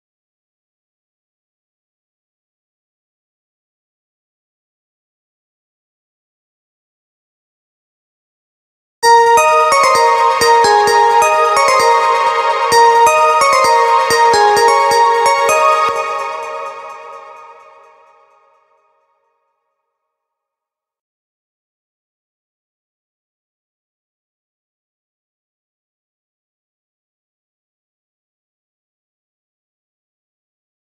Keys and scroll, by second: 6.9 ctrl+v, 15.3 space.